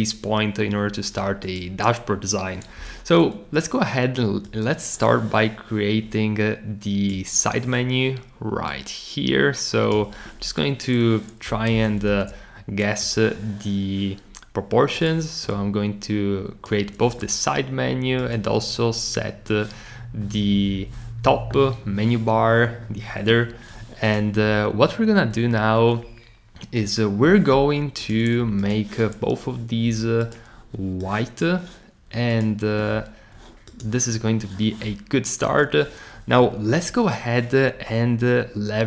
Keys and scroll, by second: 2.8 r, 11.8 super+c.